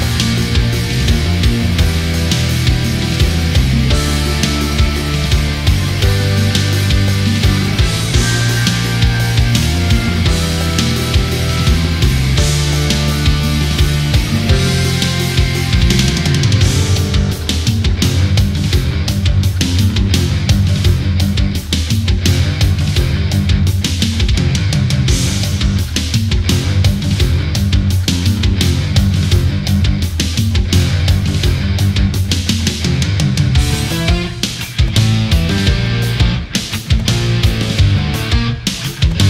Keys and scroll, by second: 19.7 space, 34.1 space.